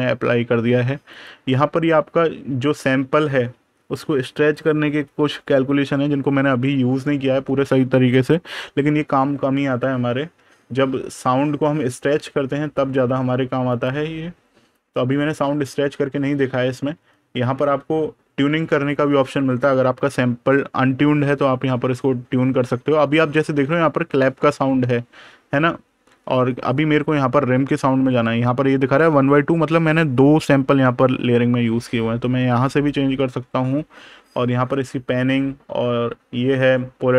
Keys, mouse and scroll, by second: 1.0 click, 10.0 super+KP_Subtract, 13.5 click, 17.0 super+KP_Add, 31.6 click.